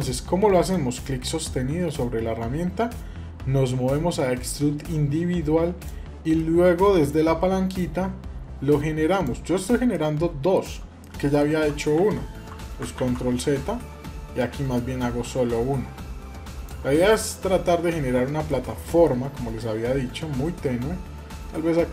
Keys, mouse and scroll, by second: 0.5-6.1 drag, 6.1 middle click, 7.5-9.2 drag, 9.3 scroll up 2, 9.7 shift+middle click, 10.8 middle click, 11.7 ctrl+z, 12.8 ctrl+z, 14.5-16.5 drag, 16.8 scroll down 1, 17.1-18.3 middle drag, 18.6 shift+middle click, 20.5-21.1 scroll up 2.